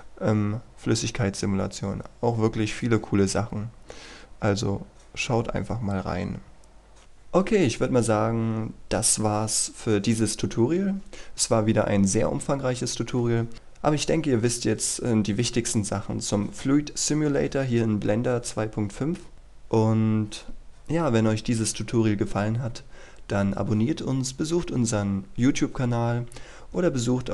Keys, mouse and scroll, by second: 3.8-6.5 scroll up 1, 7.0 click.